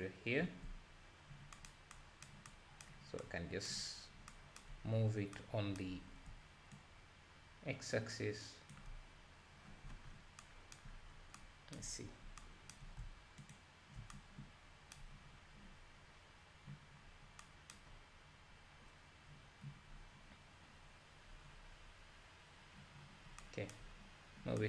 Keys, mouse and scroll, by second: 0.0 ctrl+shift+click, 1.0 scroll down 1, 6.8-13.6 shift+drag, 15.7 scroll up 6, 16.0-16.6 scroll down 1, 16.6-17.0 scroll down 3, 20.9-21.4 scroll down 2, 22.2-22.8 scroll up 3.